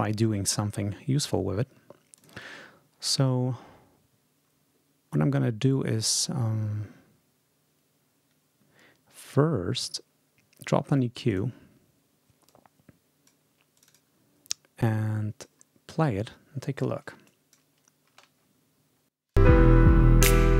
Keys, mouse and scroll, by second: 0.7-1.0 ctrl+scroll down 2, 1.3 ctrl+scroll down 2, 2.0 ctrl+click, 5.5 right click, 11.1 click, 12.3-13.3 drag, 13.6 click, 14.7 click, 17.1 click, 18.0 space, 19.1 click.